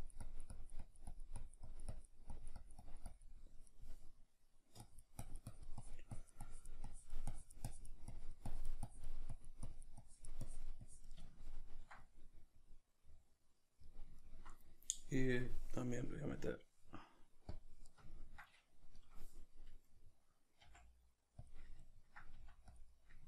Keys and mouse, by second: 11.3-15.5 ctrl+middle drag, 15.5-18.1 drag, 18.1-22.8 ctrl+middle drag, 20.6 f, 21.5 click, 22.3 f, 22.8 click, 22.9-23.2 middle drag.